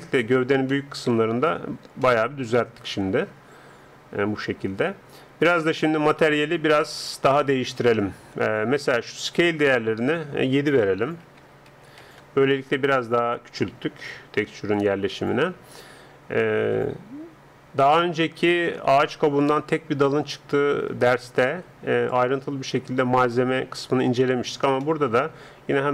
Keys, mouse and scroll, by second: 1.4 Tab, 4.9-7.7 middle drag, 9.1-13.3 drag, 13.3-17.7 middle drag, 22.1-25.9 drag.